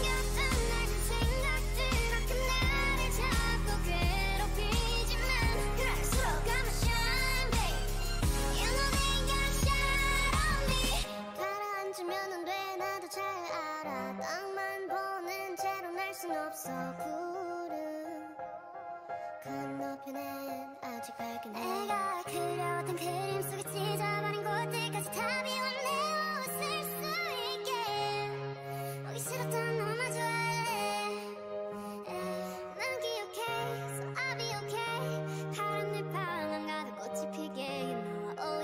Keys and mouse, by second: 0.9-6.2 drag, 1.3 g, 3.1 g, 5.0 g, 6.4 g, 7.2 a, 9.2 g, 9.6 click, 10.4 g, 11.4-13.2 drag, 12.6 g, 13.6-15.6 drag, 15.9 g, 17.2-18.9 drag, 17.4 g, 18.1 a, 19.9-21.3 right drag, 20.1 g, 21.3 click, 22.5 g, 25.1-26.2 drag, 25.2 g, 26.0 Tab, 26.4-27.9 drag, 28.1 Tab, 29.3-31.2 right drag, 30.2 x, 32.0 right click, 32.3 x, 33.4 right click, 33.6 a, 34.0 k, 36.6 k.